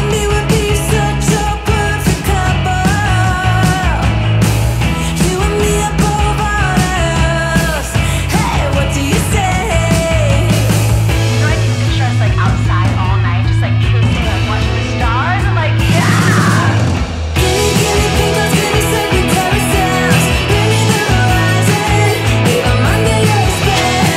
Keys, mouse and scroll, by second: 1.1-2.4 drag, 5.1-7.9 drag, 13.6-14.9 drag.